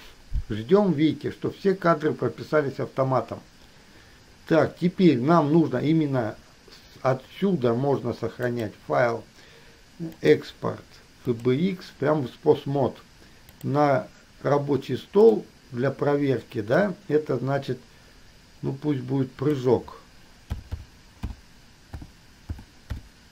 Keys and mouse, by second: 8.7-11.8 drag.